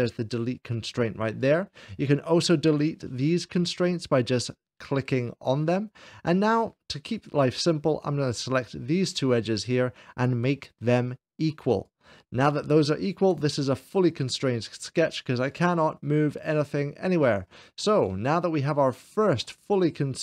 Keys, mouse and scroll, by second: 1.2-2.3 drag, 8.2-9.2 drag, 9.5-10.5 drag, 11.6-12.6 drag, 13.2-14.3 middle drag, 15.3-16.4 drag, 16.6-17.9 drag, 17.9-19.5 middle drag, 19.7 shift+middle click.